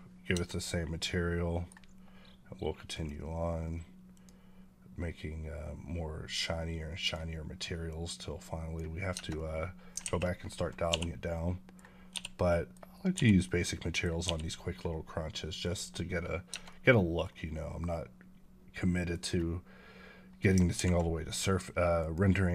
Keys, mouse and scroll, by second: 0.2 Tab, 0.7-2.8 middle drag, 2.8-9.0 drag, 9.0 Tab, 9.2-9.8 middle drag, 9.9 alt+a, 11.2-12.0 middle drag, 12.3-13.0 middle drag, 13.3-14.1 middle drag, 15.5 click, 16.4 Tab, 16.5-17.1 middle drag, 17.1-18.5 scroll up 2, 18.8 middle click, 21.8 click.